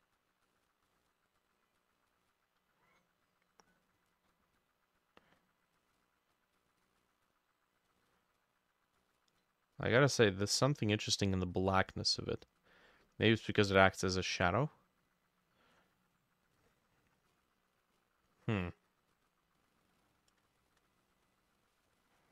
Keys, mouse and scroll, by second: 20.6 shift+click, 21.3 double click.